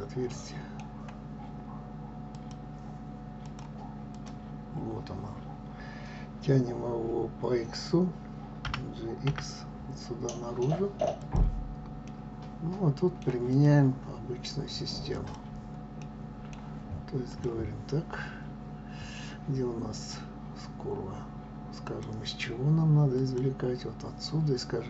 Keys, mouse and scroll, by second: 2.4-3.7 drag, 8.8 g, 12.2-13.7 middle drag, 13.7 click, 15.1 click, 16.1-17.5 middle drag, 17.5 click, 22.1 click.